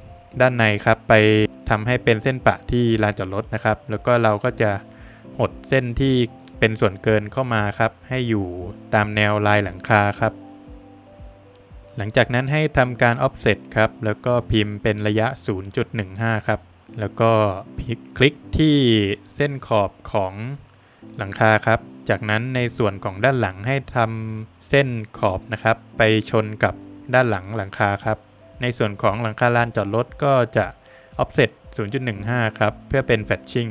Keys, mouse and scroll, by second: 0.2 space, 0.3 Escape, 0.8 scroll down 1, 1.0 middle click, 1.4 click, 1.4 double click, 1.7-2.2 scroll up 3, 3.0 click, 4.1 Escape, 4.5 middle click, 5.6 click, 7.6 Escape, 8.0-8.3 scroll down 2, 8.2 middle click, 9.0 Escape, 9.3 scroll down 1, 9.5 middle click, 11.3 space, 15.2 Return, 16.0 scroll up 2, 16.7 click, 17.3 click, 17.7 Escape, 17.7 scroll down 2, 17.7 space, 17.9 middle click, 18.6 scroll up 1, 19.6 click, 19.6 scroll up 1, 20.1 middle click, 21.3 click, 22.2 Escape, 22.5 scroll down 2, 22.8 middle click, 23.3 scroll down 2, 23.5 middle click, 24.4 middle click, 25.0 middle click, 25.3 Escape, 26.7 space, 27.8 space, 28.7 click, 30.0 Escape, 31.9 Escape, 32.4 scroll up 3, 33.2 click.